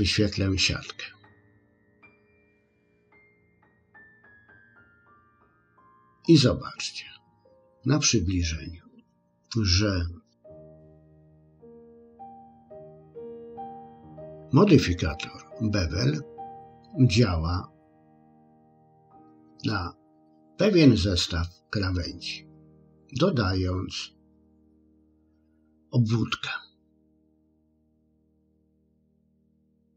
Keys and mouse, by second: 1.8-4.3 drag, 11.9 click, 18.5 click, 29.8 click.